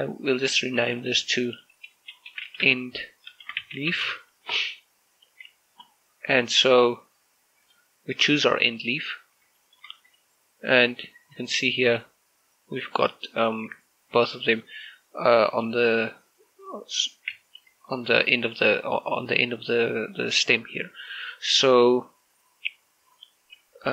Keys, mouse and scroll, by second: 0.8 right click, 1.8 click, 3.1-4.7 typing, 4.8 Return, 5.9 right click, 7.4 click, 10.4 shift+middle click, 10.9 right click, 12.2 click, 17.8 right click, 18.1 Tab.